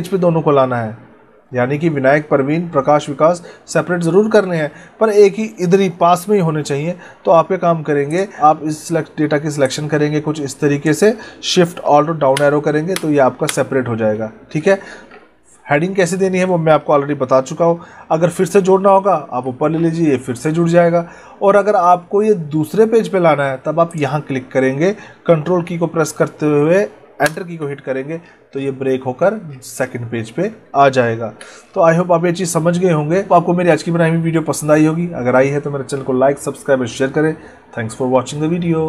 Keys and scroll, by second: 12.2 alt+shift+Down, 13.9 alt+shift+Up, 18.6 alt+shift+Up, 27.1 ctrl+Return, 31.0 ctrl+z.